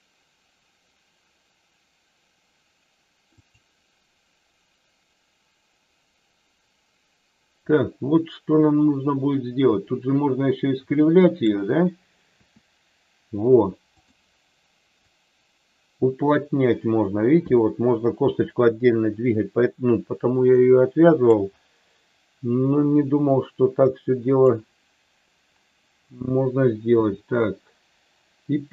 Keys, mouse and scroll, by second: 3.4 click, 7.7-11.4 drag, 12.3 r, 14.0 click, 15.1-21.2 drag, 23.8 click, 27.0 r.